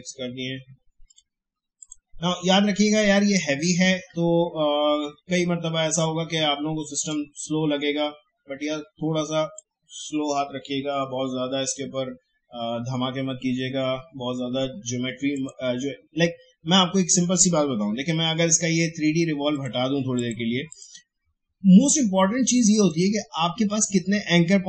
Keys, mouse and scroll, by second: 2.6 alt+scroll up 1, 3.5 alt+scroll down 1, 4.3 space, 5.3-5.9 alt+scroll up 1, 6.9 space, 7.1 click, 7.3 space, 15.3 click, 19.5 click.